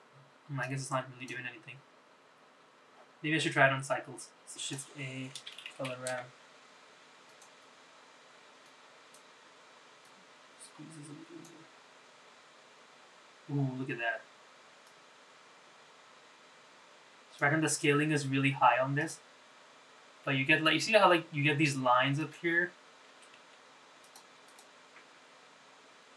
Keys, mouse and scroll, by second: 0.3 click, 14.6-17.1 drag, 18.7 click, 20.0 click, 21.9 click, 24.2 click.